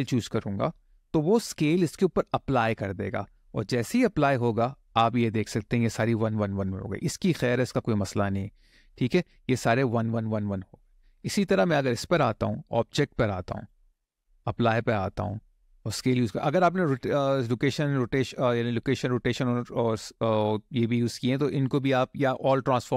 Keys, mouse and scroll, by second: 11.1 click, 13.3-22.9 drag.